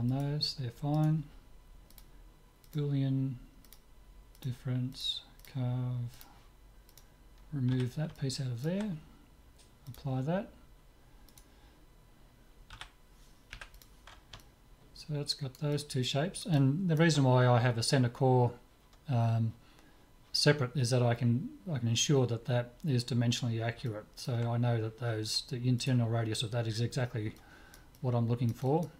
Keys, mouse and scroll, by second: 0.2-2.8 right drag, 1.9-7.9 drag, 7.7 z, 8.2-9.9 middle drag, 9.9-11.7 drag, 11.4-13.4 right drag, 12.7 z, 13.6 Delete, 14.4-18.3 middle drag, 23.9-25.9 middle drag, 25.9-27.6 right drag, 27.4 click, 27.6-28.9 middle drag.